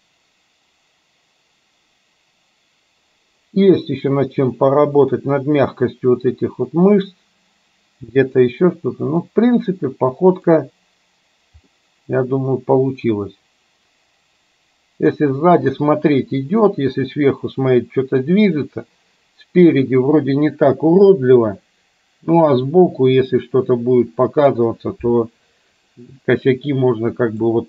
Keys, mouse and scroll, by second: 9.4-10.8 middle drag, 11.9-24.8 middle drag, 26.2-27.6 middle drag.